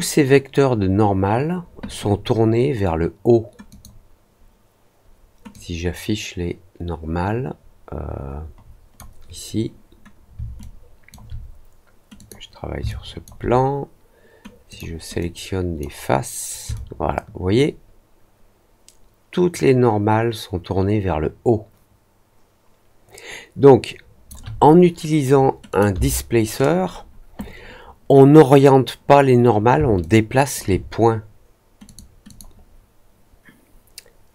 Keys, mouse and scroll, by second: 3.6 click, 5.4-8.9 drag, 10.5 alt+click, 12.1 click, 12.8 alt+click, 14.6 click, 15.1 click, 16.7-24.2 alt+drag, 25.6 click, 29.9 alt+click, 31.8 click, 32.2 click.